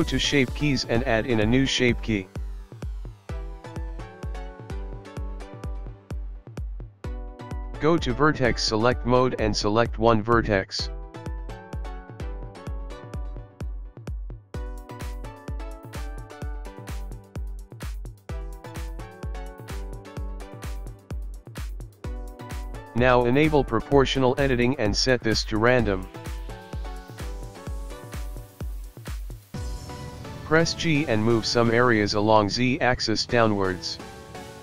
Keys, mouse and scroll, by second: 1.1 Tab, 3.1 click, 5.0 click, 7.6 Tab, 8.2-8.6 scroll up 3, 9.3 shift+middle click, 12.3 click, 14.4 click, 15.4-15.8 scroll up 3, 16.2 click, 17.5 click, 18.5 click, 20.8 click, 21.3-22.0 scroll down 5, 22.0 scroll up 2, 23.4 g, 28.3 click, 31.3 g.